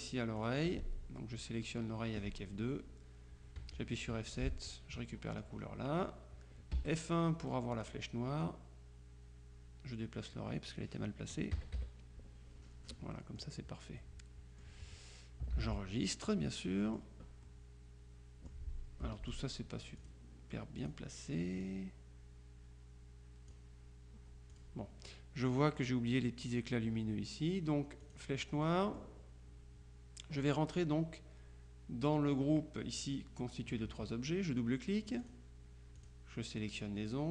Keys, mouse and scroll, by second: 0.5 click, 3.7 F7, 4.4 click, 6.8 F1, 7.8 click, 8.5-10.9 drag, 11.6 KP_Subtract, 12.9 middle click, 13.3 click, 14.1-15.2 drag, 15.6 ctrl+s, 16.4-17.5 drag, 19.1 F2, 19.4 click, 20.1 click, 20.9 click, 21.7-24.1 drag, 24.6 click, 28.1 click, 28.9 click, 30.5 click, 35.2 click, 36.1 click.